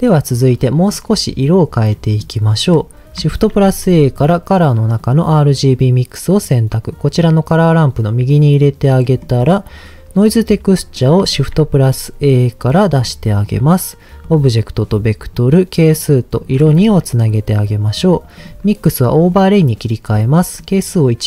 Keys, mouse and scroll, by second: 0.6 middle click, 1.9 middle click, 3.3 shift+a, 8.3 click, 9.0 middle click, 11.3 shift+a, 14.2-15.3 drag, 15.9 click, 16.8 ctrl+z, 17.3 click, 18.4-19.4 drag, 20.6 click.